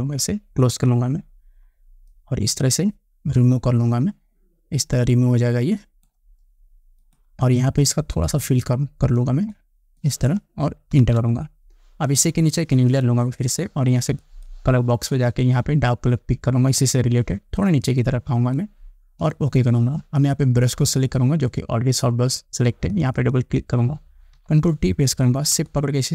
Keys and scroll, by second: 11.2 Return, 24.5 ctrl+t.